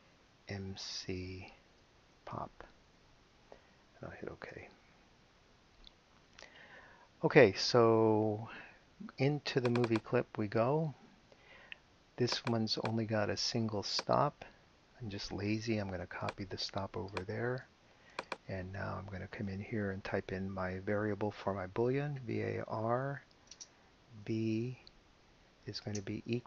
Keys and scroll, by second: 0.6-3.4 typing, 4.4 Return, 19.2 Return, 22.2 v, 25.8 space.